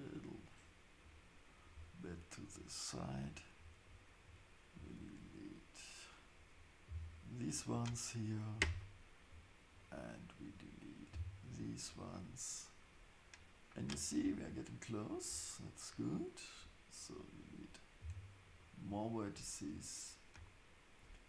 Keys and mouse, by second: 2.5-7.7 drag, 6.9 x, 8.8-11.8 drag, 11.1 x, 15.9-18.6 drag, 18.0 x.